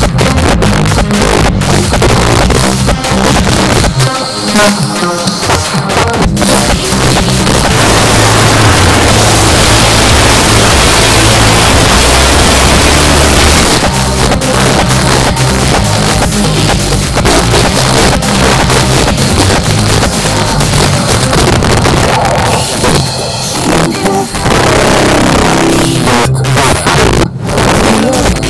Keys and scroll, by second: 13.6 Page_Down.